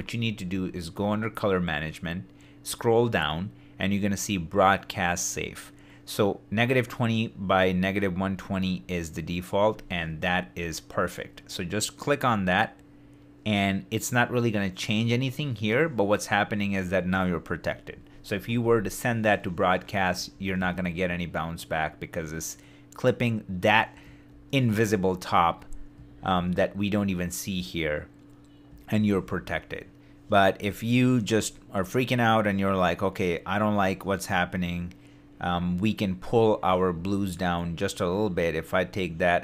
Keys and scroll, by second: 20.3 shift+d, 24.3 shift+d, 26.0 shift+d, 28.9 shift+d.